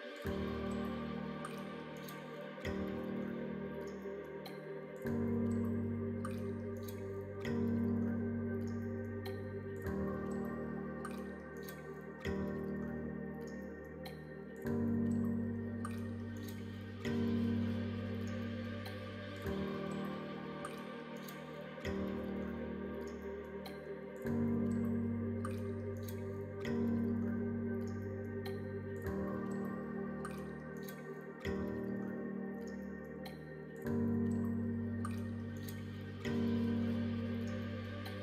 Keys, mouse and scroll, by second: 0.3 x, 2.3 click, 2.7 click, 3.6 middle click, 4.2 shift+middle click, 5.6 click, 5.9 middle click, 6.9 middle click, 7.6 shift+click, 10.3 alt+shift+click, 11.2 ctrl+z, 12.0 alt+shift+click, 14.0 ctrl+z, 15.3 alt+z, 15.8 middle click, 16.7 2, 18.8 b, 21.3 middle click, 22.3 middle click, 23.4 shift+click, 24.5 ctrl+e, 27.2 middle click, 28.0 middle click, 28.5 2, 29.1 click, 30.2 click, 31.1 middle click, 31.4 alt+z, 31.8 middle click, 32.3 alt+z, 34.3 middle click, 34.6 f, 35.0 middle click, 36.3 alt+click, 36.9 middle click.